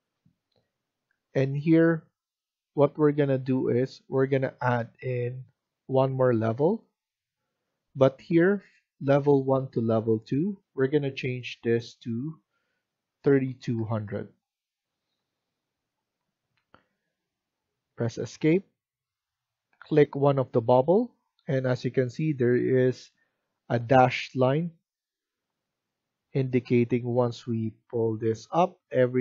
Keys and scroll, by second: 12.8-14.2 typing, 14.9 Return, 17.8 Escape.